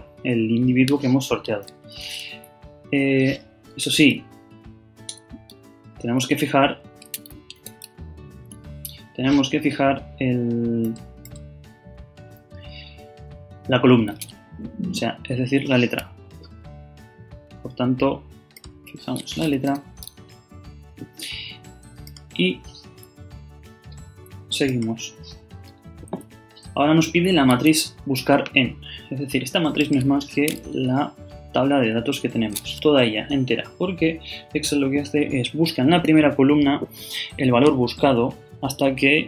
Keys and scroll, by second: 1.9 shift+,, 6.3 shift+Left, 7.5 shift+Return, 19.6 shift+4, 25.7 shift+,, 30.7 shift+super+Left, 31.7 shift+super+Down.